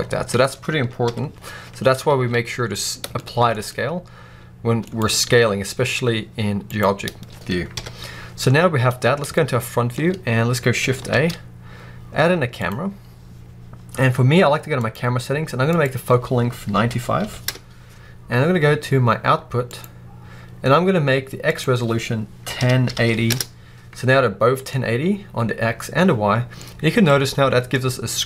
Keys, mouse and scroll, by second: 0.9 KP_1, 2.0 alt+a, 3.1-4.9 shift+middle drag, 4.9 click, 5.1 s, 6.7 right click, 7.6 KP_1, 8.5-8.9 scroll up 1, 9.2-14.7 shift+middle drag, 10.0-10.9 scroll up 2, 10.9 shift+a, 14.7 click, 15.6-19.6 drag, 17.4 Return, 21.4-26.5 drag, 23.2 Return, 26.1-26.5 scroll down 1, 26.5-28.2 middle drag, 26.9-27.6 scroll down 2.